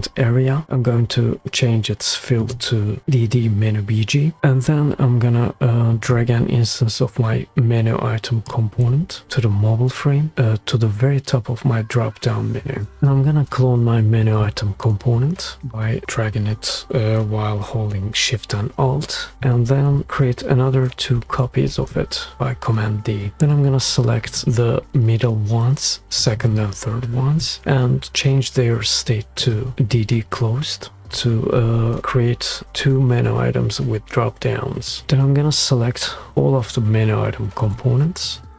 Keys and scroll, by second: 21.1 super+d, 21.6 super+d.